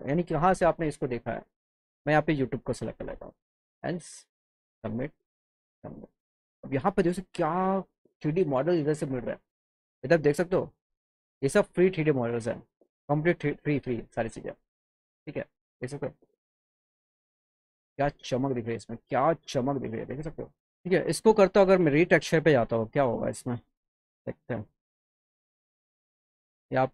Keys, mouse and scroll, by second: 2.1 click, 3.6 click, 5.0 click, 9.6 scroll down 2, 10.4 click, 15.4 click, 16.3 click, 17.3 click, 19.8 click, 21.7 click.